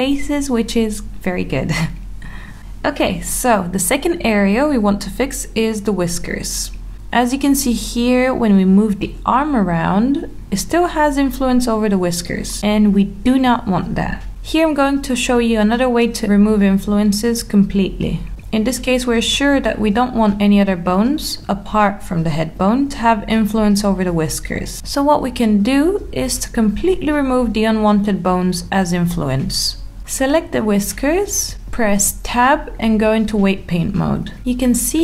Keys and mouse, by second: 1.4 middle click, 2.6 ctrl+z, 7.3 shift+middle click, 9.5 click, 10.2 middle click, 11.2 r, 14.4 g, 16.0 click, 16.5 click, 32.5 Tab.